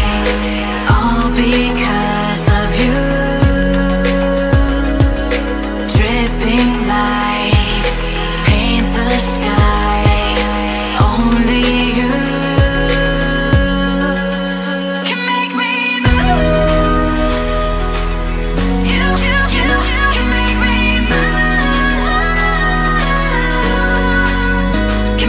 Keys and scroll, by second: 1.6 v, 7.2 m, 11.4 Tab, 13.0 Tab, 14.0 Tab, 16.6 Tab, 17.5 v, 20.8 typing, 22.4-24.7 typing.